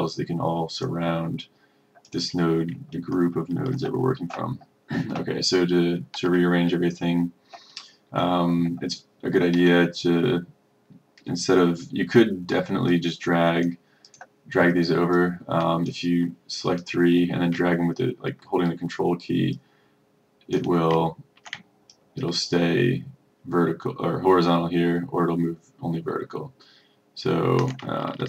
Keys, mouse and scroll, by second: 3.0-3.4 ctrl+scroll, 6.6-7.1 ctrl+scroll, 13.0 click, 19.6 ctrl+click, 22.0 ctrl+click.